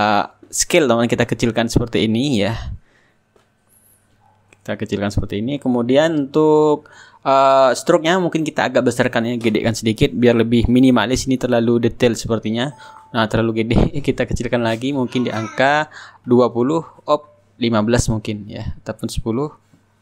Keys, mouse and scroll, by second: 0.7-4.1 drag, 6.9 click, 9.4 click, 11.6 click, 13.0-15.5 drag, 15.9 KP_2, 16.1 KP_0, 16.5 Return, 18.5 click, 19.9 KP_1.